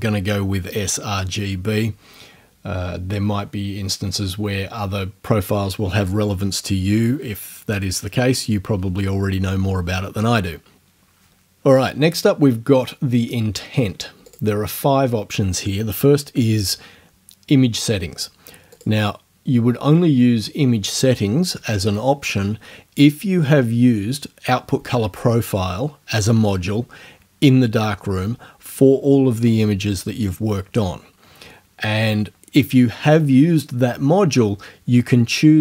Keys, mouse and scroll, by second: 14.3 click, 18.8 click.